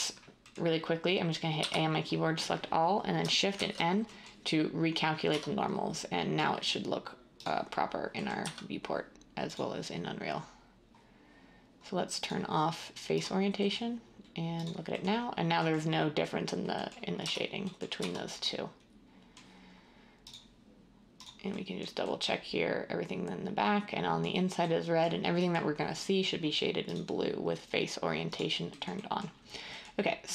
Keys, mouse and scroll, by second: 1.5 a, 3.5 n, 5.2 Tab, 8.4 z, 17.2 Tab, 18.0 Tab.